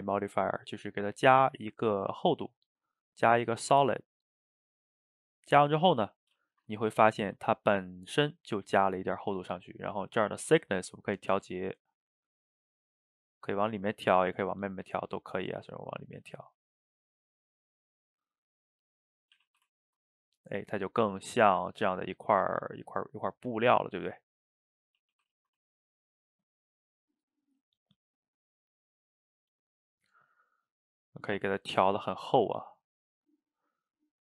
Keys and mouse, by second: 5.1-5.6 middle drag, 5.6 shift+right click, 5.8-10.2 ctrl+middle drag, 11.6-14.6 shift+drag, 19.1 middle click, 19.4 a, 19.6 a, 19.8-23.1 ctrl+middle drag, 24.8 middle click, 25.0 a, 25.1 a, 25.4 shift+right click, 25.7-28.2 ctrl+middle drag, 28.2-31.2 shift+drag, 34.0-34.2 shift+drag.